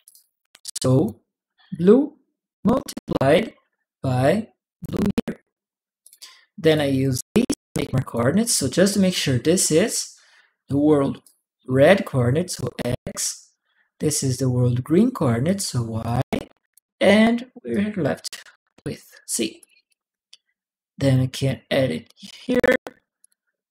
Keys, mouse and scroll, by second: 0.4 click, 1.5 click, 3.1-4.6 drag, 5.8 click, 6.5 click, 6.6 ctrl+p, 6.9 w, 7.5 click, 11.0-12.3 drag, 15.2 click, 16.0 click, 17.5 click, 18.6 click, 19.4 click, 19.7 click, 21.2 click, 23.0 click.